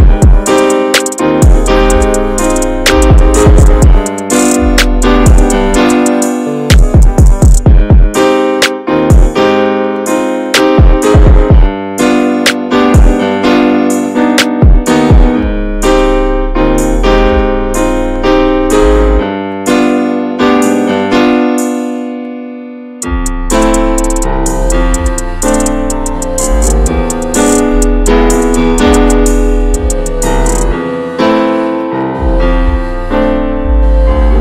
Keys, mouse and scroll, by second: 0.9-1.3 scroll up 2, 1.3 middle click, 1.7 scroll down 2, 2.0-6.5 middle drag, 6.5 scroll up 1, 6.7-7.9 middle drag, 7.9-8.4 scroll down 5, 8.4-10.0 shift+middle drag, 10.0-10.4 drag, 10.4-10.7 scroll down 4, 10.7-11.1 shift+middle drag, 11.1-11.6 scroll up 4, 11.6-12.9 middle drag, 12.9-13.7 drag, 13.7 middle click, 14.5-15.1 scroll down 1, 15.1-20.6 shift+middle drag, 20.6 click, 21.1-21.7 scroll down 1, 21.7-22.8 middle drag, 22.8-23.5 scroll up 5, 23.5-24.0 shift+middle drag, 24.0-24.7 scroll up 4, 24.7-33.0 middle drag, 33.0-33.8 drag, 33.8-34.1 scroll down 4.